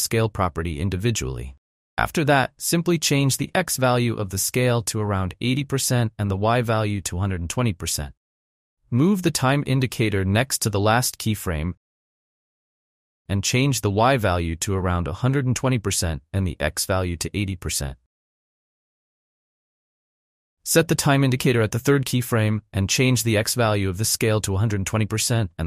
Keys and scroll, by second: 5.3 8, 5.8 Return, 6.9 1, 7.3 0, 7.4 Return, 14.1-15.4 typing, 17.3-18.5 typing, 23.4 ctrl+z, 23.8 1, 24.3 0, 25.1 Return.